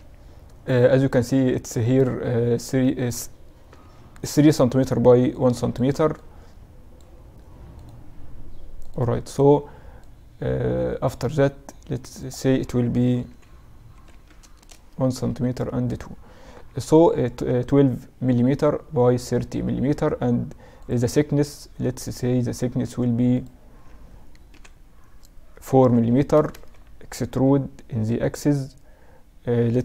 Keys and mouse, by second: 0.0 n, 3.8 n, 5.4-8.6 drag, 10.0-16.6 drag, 16.6 n, 24.5 KP_1, 26.0 Tab, 26.4 a, 26.5 a, 27.4 e.